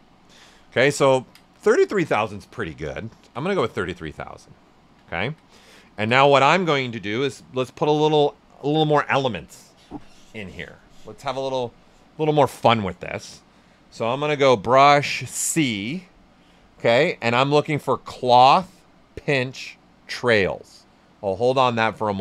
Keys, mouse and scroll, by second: 1.6 ctrl+alt+right click, 5.6 alt+right click, 7.5 ctrl+alt+right click, 15.6 c.